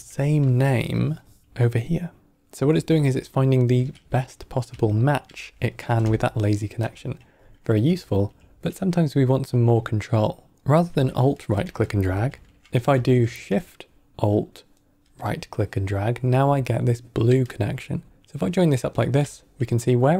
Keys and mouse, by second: 0.0 middle click, 0.6-0.9 middle drag, 1.1 middle click, 2.9 ctrl+middle click, 3.5 ctrl+middle click, 4.0 middle click, 4.8 ctrl+middle click, 5.4 ctrl+middle click, 6.3-6.7 alt+right drag, 8.0 ctrl+right click, 11.0 alt+right drag, 11.9 ctrl+z, 14.7-20.1 alt+shift+right drag.